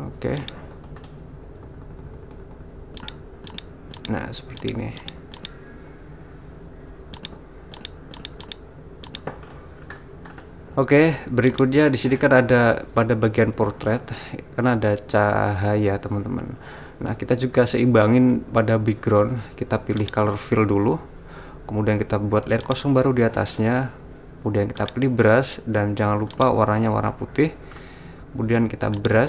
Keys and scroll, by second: 1.7-2.5 typing, 6.7 ].